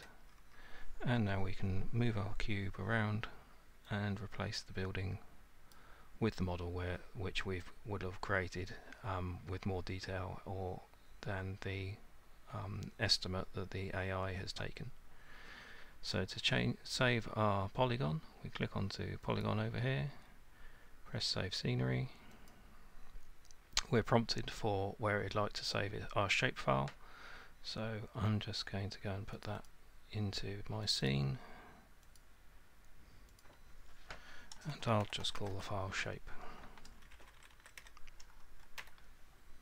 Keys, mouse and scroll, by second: 0.3 scroll, 4.1-5.4 scroll, 5.7 click, 19.5 click, 22.5 click, 29.4 click, 29.7 click, 30.9 click, 31.1 click, 32.2 click, 33.4 click, 34.8-35.5 typing, 37.1 Left, 37.3 Left, 37.4 Left, 37.6 Left, 37.8 Delete, 38.6-39.3 typing.